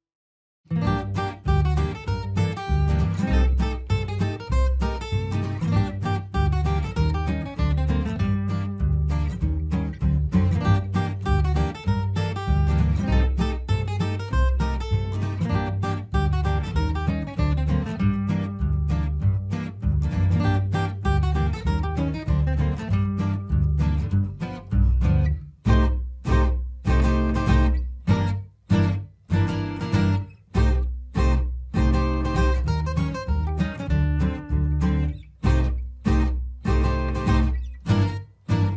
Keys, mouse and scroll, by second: 6.4 F3, 7.2 click, 8.1 space, 8.5 right click, 9.4 click, 10.3 right click, 11.2 click, 14.0 F4, 15.1 click, 16.2 F2, 16.6-22.8 drag, 16.9 typing, 22.8 right click, 23.8-29.5 drag, 29.5 space, 29.7-31.5 drag, 32.2 right click, 34.1 click, 36.1 F3, 37.1-38.7 drag.